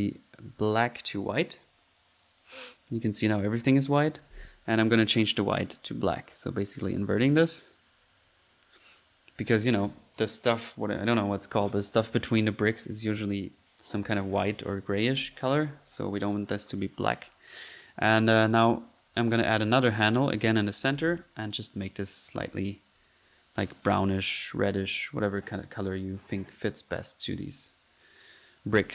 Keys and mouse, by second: 1.1 click, 2.3 click, 3.7 click, 4.2 click, 6.4 click, 7.1 drag, 7.9 click, 8.1 middle click, 9.6 middle click, 17.3 click, 18.6 click, 20.0 click, 21.5 click, 22.3 click, 23.0 click, 24.1-27.4 drag.